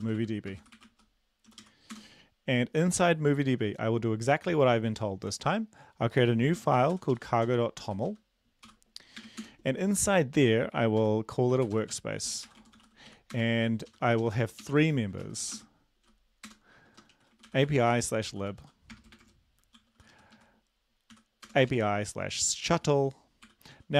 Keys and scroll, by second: 0.8-2.8 typing, 7.3-10.3 typing, 11.8-23.9 typing.